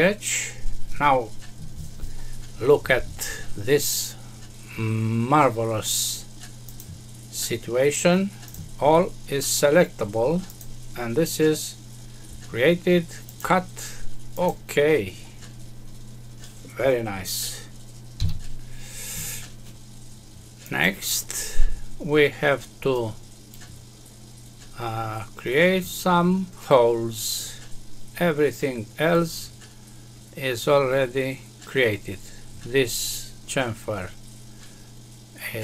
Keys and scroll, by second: 18.1 F6.